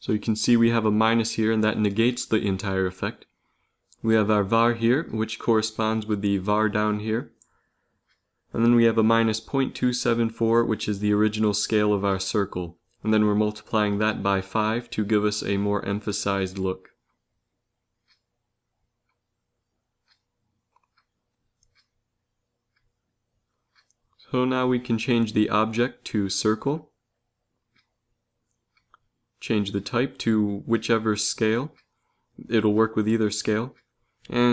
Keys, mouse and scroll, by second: 30.4-33.7 drag.